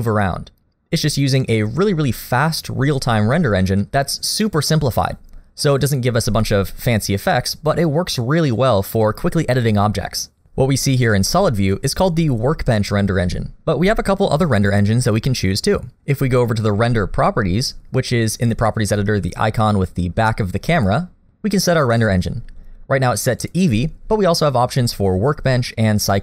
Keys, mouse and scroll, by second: 6.8 middle click, 20.8 click, 23.4 click.